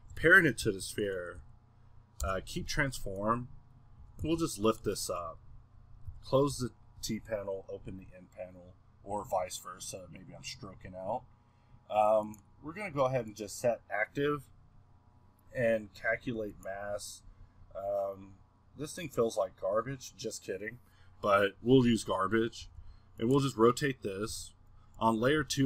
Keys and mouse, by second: 1.6 middle click, 2.6 a, 3.6 middle click, 4.0 g, 5.0-6.1 middle drag, 6.1 n, 6.5 t, 12.2-21.7 drag, 21.7 middle click, 22.6 r, 23.6-24.3 middle drag, 24.3 a, 25.3 middle click, 25.4 KP_2.